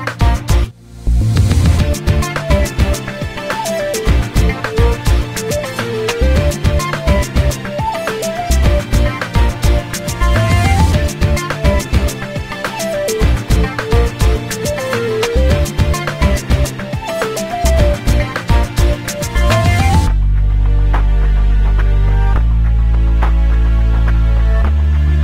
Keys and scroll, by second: 10.6 p, 13.5 2, 15.0 5, 16.0 Return, 19.1 l.